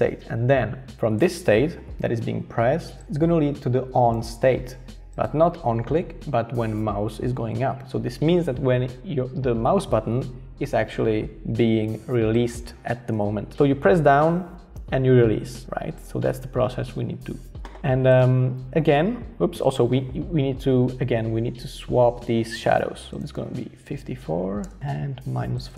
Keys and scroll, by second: 23.7-25.7 typing, 24.6 Return.